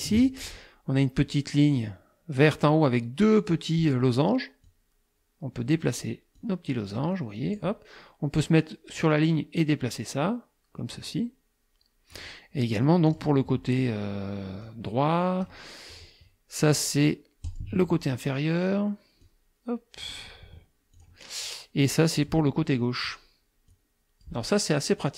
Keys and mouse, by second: 4.7-6.2 drag, 6.4-7.8 drag, 9.0-12.4 drag, 13.1 click, 14.6-15.6 drag, 17.5 click, 19.3-20.3 drag, 21.0 click, 22.2 click, 23.7 click, 25.0-25.1 drag.